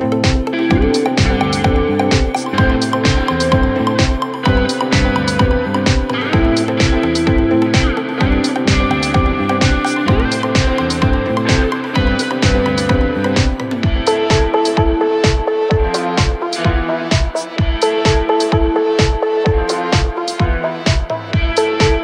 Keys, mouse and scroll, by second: 0.1-1.2 scroll up 9, 1.5 scroll down 9, 1.7 middle click, 2.1 scroll up 4, 2.2 space, 2.3 right click, 3.8 middle click, 4.3 scroll down 4, 4.5 middle click, 5.2 middle click, 6.1 scroll up 3, 6.4 middle click, 6.8 middle click, 7.8 space, 8.4 scroll up 4, 8.8 shift+click, 9.2 shift+click, 10.5 m, 10.7 scroll up 3, 11.5-12.4 scroll up 6, 12.4 Escape, 12.5 space, 12.7 shift+click, 15.0-15.8 scroll down 29, 15.8 middle click, 16.0 scroll up 4, 16.1 space, 16.6 Delete, 16.8 scroll down 16, 17.2 middle click, 17.5 middle click, 17.8 middle click, 17.8 scroll up 13, 18.2 scroll down 7, 18.5 middle click, 19.3 ctrl+s, 20.2 scroll up 3, 20.7 r.